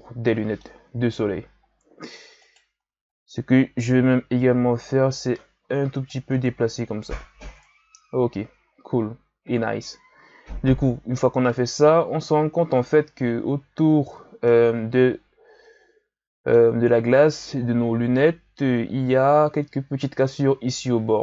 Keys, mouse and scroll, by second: 0.9 KP_1, 1.6-2.4 scroll up 3, 2.4 right click, 2.7 Tab, 3.9 right click, 6.3 Tab, 7.5-10.5 scroll down 1, 10.5-12.2 ctrl+scroll down 1, 12.2-13.3 ctrl+scroll up 2, 13.3-14.0 scroll up 2, 14.0-14.4 scroll down 1, 14.4-17.4 middle drag, 17.8 KP_1, 18.5-21.2 scroll up 1.